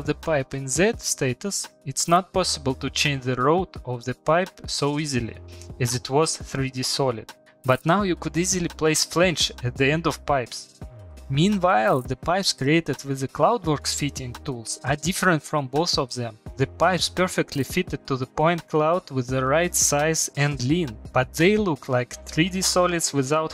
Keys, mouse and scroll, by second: 0.5 click, 3.8 click, 8.0 click, 9.3 click, 10.5 click, 14.7-15.1 typing, 20.2 c.